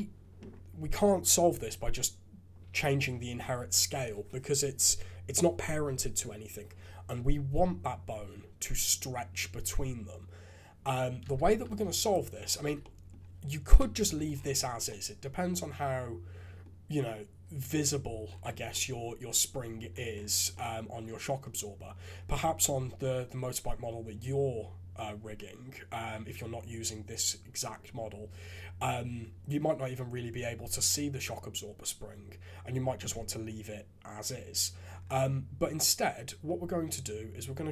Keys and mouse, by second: 11.2 ctrl+Tab, 11.8 alt+a, 12.7 shift+z, 13.7 KP_Decimal, 14.1 alt+a, 14.8-16.6 drag, 18.7-19.8 drag, 20.6 click, 34.5 click, 36.4-37.7 drag.